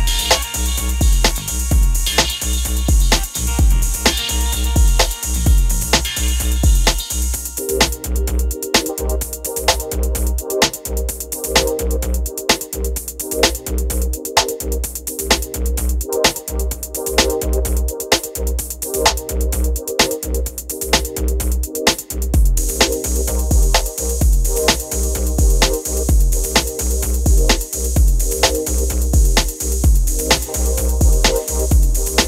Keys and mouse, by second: 1.5-3.3 drag, 3.4-5.5 drag, 5.5 middle click, 11.1-12.8 middle drag, 15.0-16.5 middle drag, 16.5-18.3 drag, 18.4 click, 18.7-20.2 drag, 20.2-20.6 middle drag, 20.7-21.2 middle drag, 21.3 middle click, 25.3 middle click, 28.3 middle drag, 28.5 click, 28.7 middle click, 28.8 middle click, 28.9-30.5 drag, 32.0-32.2 middle drag.